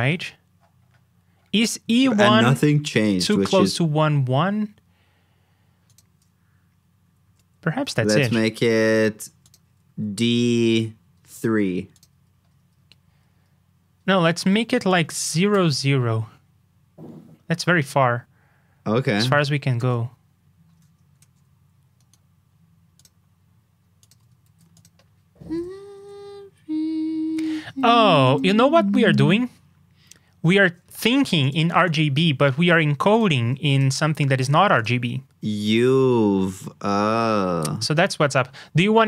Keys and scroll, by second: 2.1 super+b, 7.2 super+f, 21.2 super+s, 24.4 super+c, 25.4 super+v.